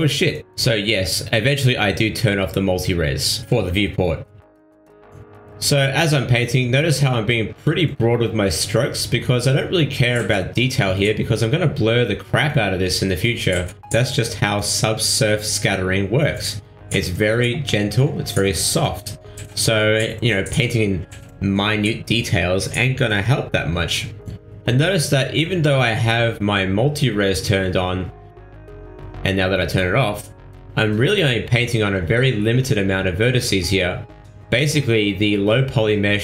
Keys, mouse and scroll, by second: 0.2 middle click, 0.8 middle click, 2.8 middle click, 3.5 middle click, 4.0 ctrl+middle click, 4.3 middle click, 5.4 ctrl+middle click, 6.7 click, 8.6 click, 10.1 click, 11.4 click, 12.2 middle click, 13.7 middle click, 14.2 shift+middle click, 14.8 middle click, 15.2 middle click, 15.8 shift+middle click, 16.4 ctrl+middle click, 16.7 middle click, 17.9 click, 18.9 middle click, 19.8 shift+middle click, 20.0 middle click, 20.4 shift+middle click, 20.8 middle click, 21.6 click, 23.7 click, 25.6 middle click, 26.3 middle click, 27.5 click, 29.0 click, 30.1 middle click, 31.5 click, 33.0 click, 34.8 ctrl+middle click, 35.2 shift+middle click, 35.6 middle click, 36.0 ctrl+middle click.